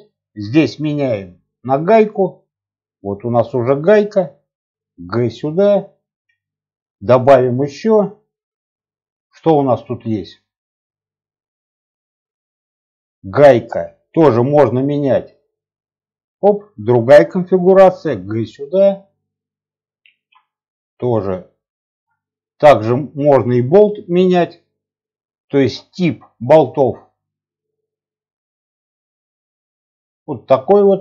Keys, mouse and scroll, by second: 0.6-1.9 drag, 4.8 g, 6.5 click, 7.0-9.9 drag, 13.7-16.1 drag, 17.8 g, 20.0 shift+a, 22.6-23.7 drag, 25.9-30.7 drag.